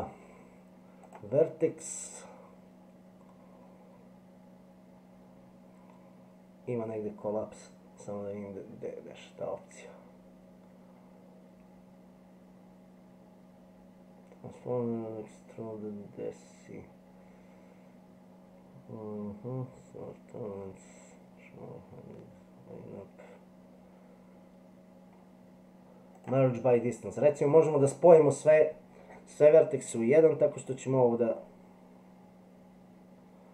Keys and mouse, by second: 1.2-26.2 drag, 30.6-33.5 drag.